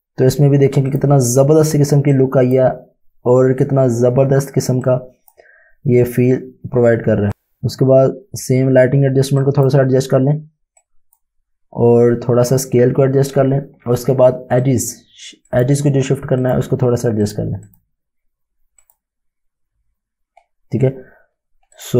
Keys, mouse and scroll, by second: 0.9 click, 4.8 click, 14.6 click, 21.7 click.